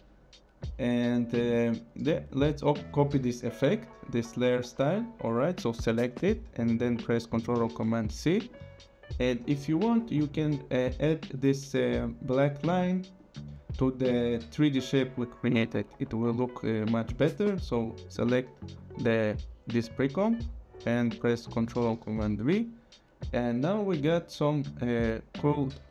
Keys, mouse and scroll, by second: 2.3 click, 5.9 click, 7.5 ctrl+c, 8.5 click, 9.8 click, 13.2 click, 18.1 click, 21.7 ctrl+v, 23.9 click, 25.3 click.